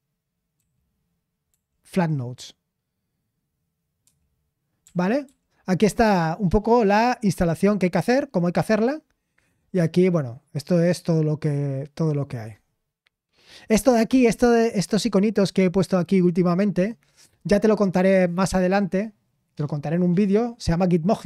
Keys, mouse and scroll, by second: 1.6-2.4 typing, 4.0 typing, 5.2-5.7 typing, 9.1 scroll up 1.